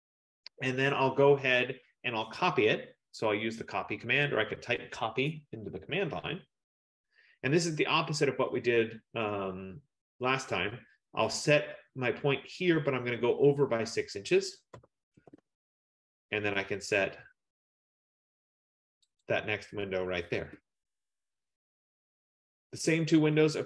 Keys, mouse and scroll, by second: 4.5 click, 14.9 6, 15.3 shift+', 15.4 Return, 19.3 click, 20.4 Return, 21.6-23.6 scroll.